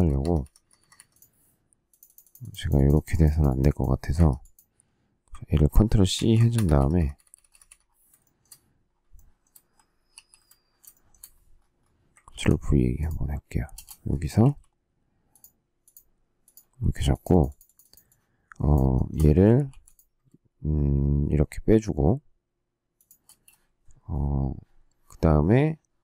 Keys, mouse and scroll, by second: 0.1 Escape, 4.1 Escape, 6.1 ctrl+c, 6.5 Escape, 6.7 Escape, 8.2 shift+middle click, 9.1 shift+middle click, 10.1 alt+t, 10.9 shift+middle click, 12.2 ctrl+v, 13.6 space, 14.3 q, 16.7 space, 18.9 shift+middle click, 19.6 m, 22.9 shift+click, 23.2 space.